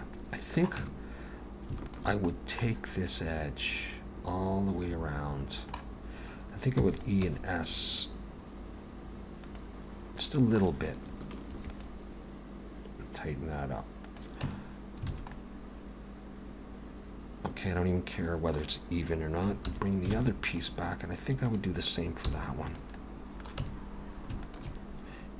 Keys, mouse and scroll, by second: 0.1 middle click, 0.8 Tab, 1.8 alt+shift+click, 2.3 scroll down 2, 2.6 middle click, 6.0-6.8 scroll up 1, 6.8 e, 7.3 s, 10.2 middle click, 11.5 ctrl+r, 14.5 Tab, 15.1 alt+a, 15.3 middle click, 19.6 alt+h, 20.1 alt+a, 20.5 click, 21.4 click, 22.1 h, 22.7 click, 23.0 middle click, 23.6 Tab, 24.4 alt+shift+click.